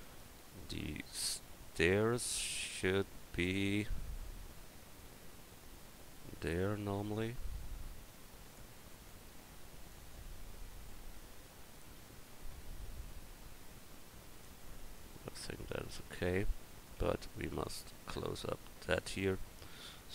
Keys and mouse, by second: 8.0 click, 17.0 Tab.